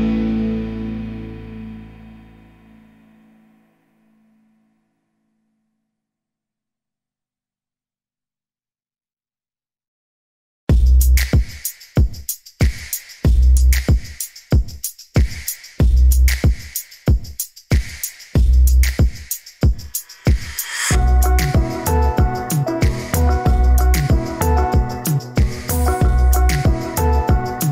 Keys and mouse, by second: 3.2 middle drag, 3.6 middle drag, 4.6 ctrl+click, 6.2-9.0 middle drag, 10.3 ctrl+b, 20.6-22.6 middle drag, 25.0-26.7 middle drag, 27.5 ctrl+r.